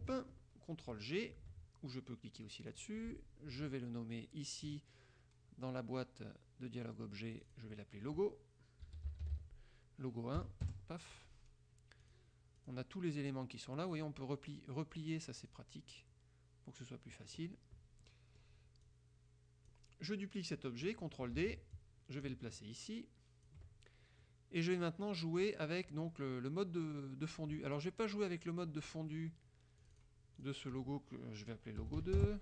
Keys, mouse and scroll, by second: 2.8 click, 7.4 click, 8.7-10.5 typing, 10.8 KP_Enter, 12.1 click, 12.7 click, 14.0 click, 15.6 click, 18.2 click, 19.0 click, 21.5 ctrl+d, 21.9-23.8 ctrl+drag, 24.4 click, 30.0 click, 30.5 click, 32.0 BackSpace, 32.1 KP_2, 32.3 KP_Enter.